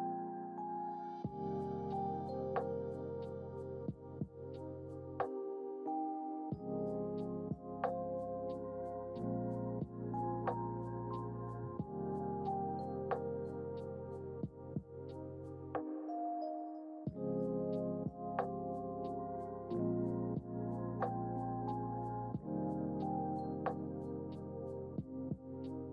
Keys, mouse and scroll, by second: 0.6-1.1 scroll down 1, 1.4 click, 2.4-8.2 drag, 10.7 drag, 12.0 click, 13.2-15.7 drag, 16.6 click, 18.6 click, 19.9 click, 20.8-21.5 drag, 22.8 click, 24.0-24.8 scroll down 3, 25.4 click.